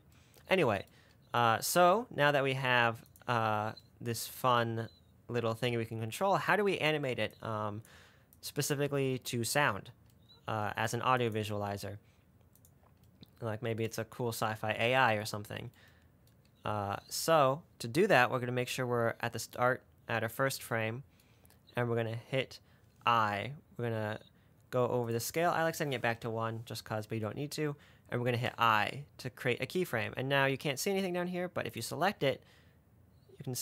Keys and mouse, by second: 3.4 click, 6.8 click, 7.8 click, 8.6-9.6 drag, 11.6 click, 25.3 click, 31.4-33.6 drag.